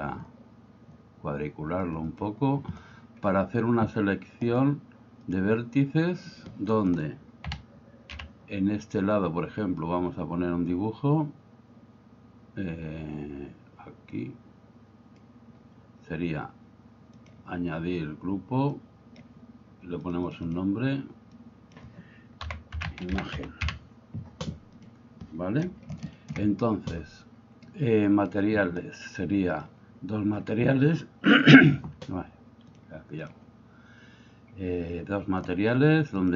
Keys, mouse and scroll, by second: 2.2 click, 5.3 click, 7.5 a, 8.1 b, 17.2 click, 18.9 click, 20.1 click, 20.3-24.9 drag, 26.1 shift+middle drag, 27.7 click, 29.6 click, 32.7 click, 36.2 click.